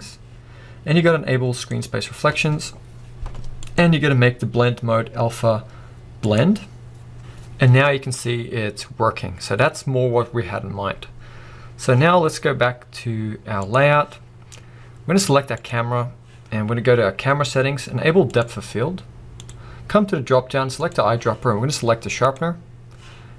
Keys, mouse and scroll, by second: 1.6 click, 3.7-6.1 drag, 7.2 scroll down 1, 7.4 scroll up 1, 8.6 scroll down 1, 9.3-13.8 drag, 14.6-15.0 scroll down 1, 15.8 click, 18.3 click.